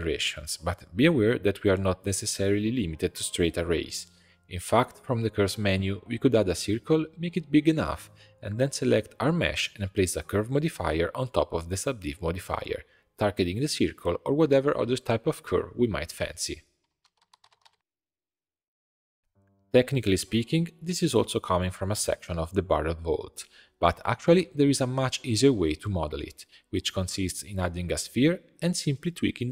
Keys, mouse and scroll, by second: 1.0-3.3 middle drag, 3.3-4.2 drag, 4.7 shift+a, 7.1 s, 10.3 click, 11.3-14.0 drag, 14.6 click, 19.7 alt+shift+click, 20.5 shift+click, 20.8 x, 21.2 2, 21.4 click, 21.8 click, 22.2 g, 22.9 click, 23.2 g, 24.3 middle click, 25.0 click, 25.1 g, 26.3 middle click, 26.8 middle click, 27.2 shift+a.